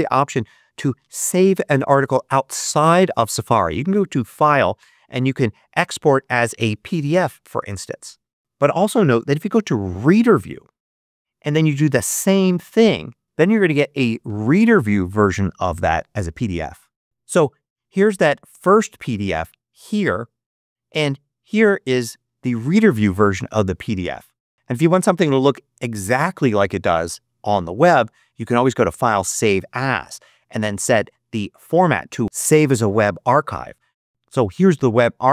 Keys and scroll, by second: 9.9 shift+super+r, 13.2 2, 14.1 Return, 18.4 space, 20.4 space.